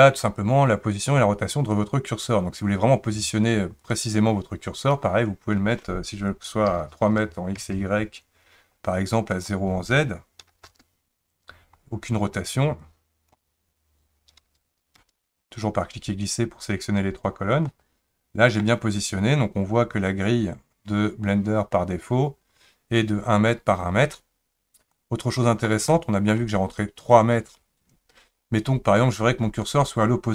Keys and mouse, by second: 3.9-7.6 drag, 9.3-10.7 drag, 12.9-15.0 drag, 17.7-18.6 middle drag, 25.0-25.7 middle drag, 25.9-26.3 shift+middle drag.